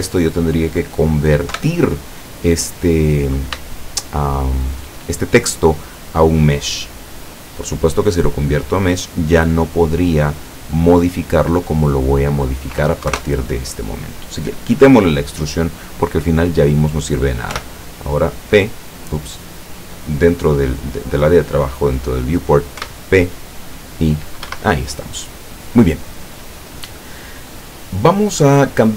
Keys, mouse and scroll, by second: 1.6 KP_7, 3.7-5.0 shift+middle drag, 12.1 click, 13.1 KP_0, 13.1 KP_Enter, 17.6 p, 22.9 p, 24.6 Escape.